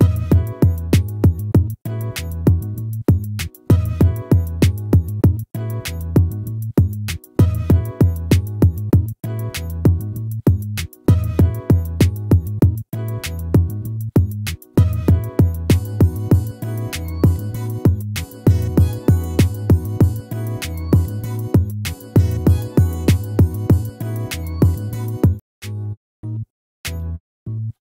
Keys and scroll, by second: 2.4 ctrl+-, 26.0 ctrl+-.